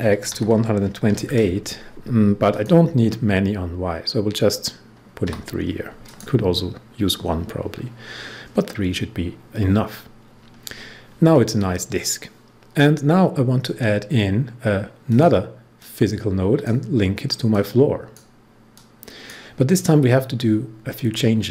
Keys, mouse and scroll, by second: 0.0-1.0 typing, 2.4 click, 5.2 3, 6.0 click, 15.0-19.8 drag, 19.8 scroll down 1, 20.3-20.9 scroll down 1.